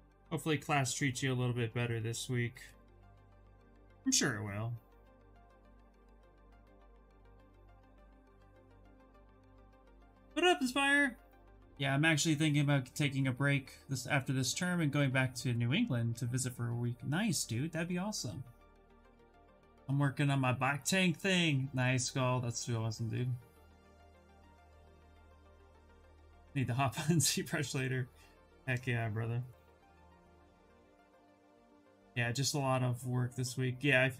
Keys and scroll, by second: 2.7 ctrl+z, 3.3 ctrl+z, 29.2 ctrl+z.